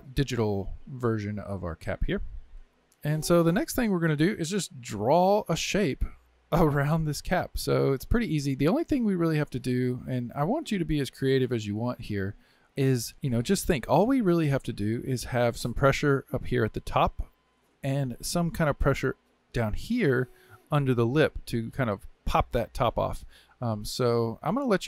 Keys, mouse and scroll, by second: 1.0 click, 1.2-2.9 drag, 3.4-5.0 middle drag, 5.0 KP_1, 6.8-7.6 scroll down 2, 7.6-10.0 scroll down 1.